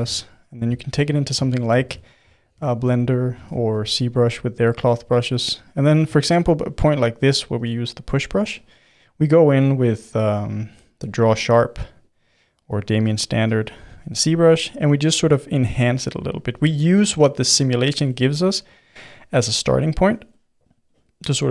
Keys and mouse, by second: 0.6-4.8 middle drag, 4.8-7.5 drag, 7.5 f, 8.1-10.0 drag, 10.0 middle click, 10.9 click, 11.7 middle click, 12.6-15.5 drag, 15.5-17.2 middle drag, 17.2-21.5 drag.